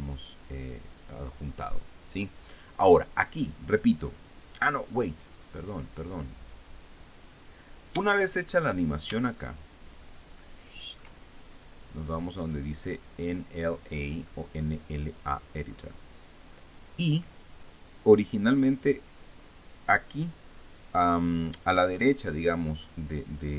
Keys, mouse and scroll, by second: 6.2 click, 7.1 click, 10.0-11.8 shift+middle drag, 13.1 click, 16.0 click.